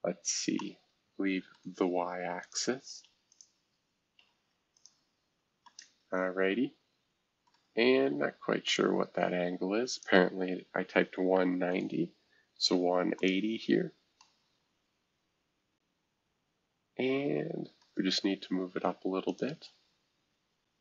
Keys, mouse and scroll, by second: 1.5 middle click, 2.4-4.2 drag, 3.3-4.2 typing, 4.7 click, 5.6-7.5 scroll up 1, 7.5-8.6 middle drag, 8.7-10.9 drag, 9.6-11.8 typing, 13.2 click, 13.7-17.8 scroll up 2, 14.2-19.2 middle drag, 19.2 click.